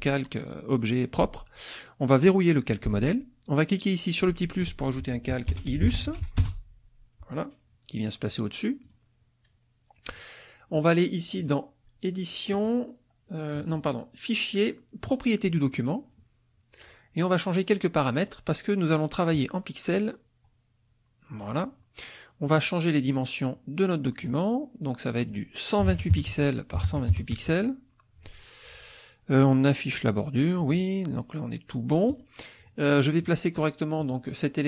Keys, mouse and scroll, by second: 2.6 click, 4.2 click, 5.2-6.6 typing, 8.8 click, 10.1 click, 11.4 click, 15.5 click, 17.5 click, 19.3-21.6 drag, 23.1-24.4 drag, 25.1 click, 25.8-27.1 typing, 26.3 Tab, 27.4 Tab, 32.1 click, 32.5-34.0 scroll up 1, 34.0 click.